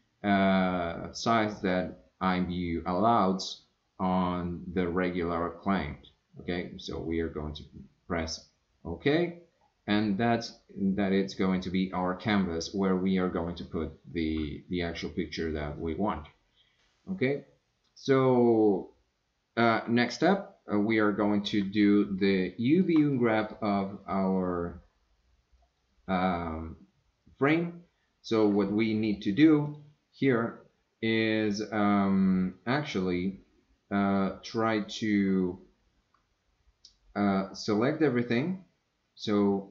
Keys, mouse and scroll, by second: 22.4 shift+middle click, 23.1 middle click, 25.6 click, 28.6 middle click, 29.7 click, 32.9-34.2 middle drag.